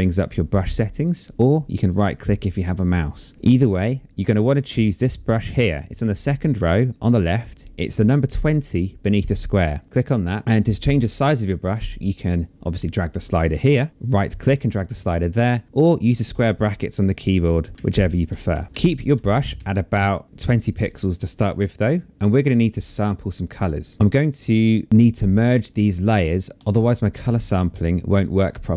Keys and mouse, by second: 1.4 right click, 3.3 click, 7.8 click, 9.8 click, 12.4 click, 13.9 right click, 14.3 click, 15.9 right click, 16.7 click.